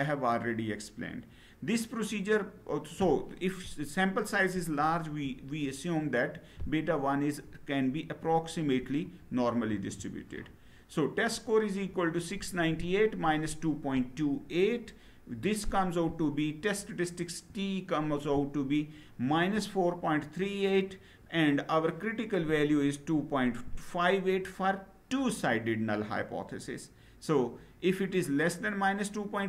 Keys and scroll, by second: 9.5 Down.